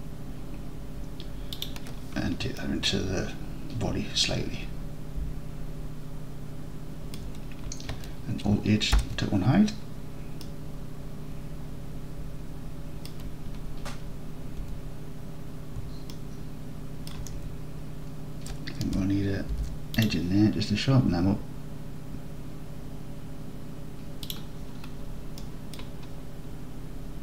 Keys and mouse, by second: 2.6 alt+middle click, 3.0-3.7 alt+middle drag, 4.3-7.2 alt+middle drag, 9.0 alt+h, 10.5-13.1 alt+drag, 14.7 Tab, 16.2-17.2 alt+drag, 19.6 ctrl+r, 24.3 click, 25.4-25.8 drag.